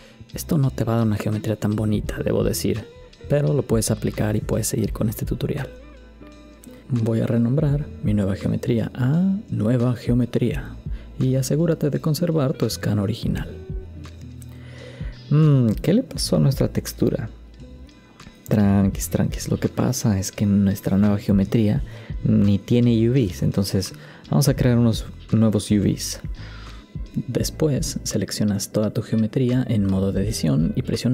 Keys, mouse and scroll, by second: 11.0 BackSpace, 12.8 click, 13.6 click.